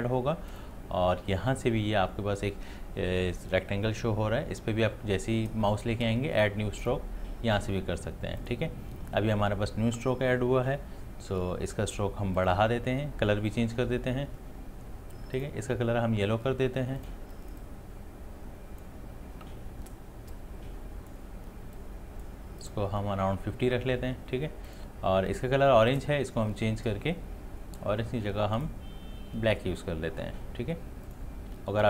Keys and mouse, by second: 6.8 click, 12.4-20.3 drag, 20.7-28.6 drag, 31.1-31.8 drag.